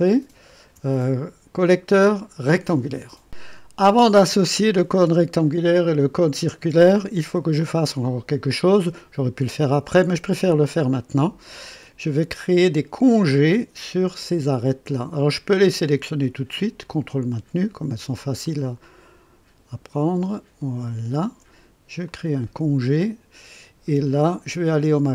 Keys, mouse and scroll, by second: 7.0 click, 7.9 right click, 8.5-9.9 drag, 10.9-11.5 right drag, 13.2 click, 16.8 ctrl+click, 18.4 ctrl+click, 20.8 ctrl+click, 22.0 click, 24.6 scroll up 1.